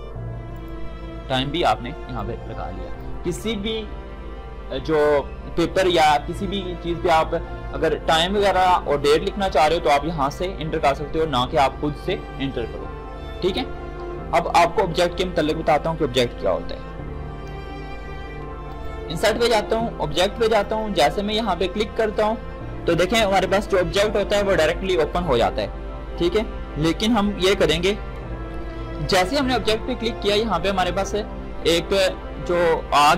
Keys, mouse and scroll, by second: 15.9 ctrl+shift+Num_Lock, 16.3 ctrl+n, 18.7 click, 18.7 click, 28.3 F9.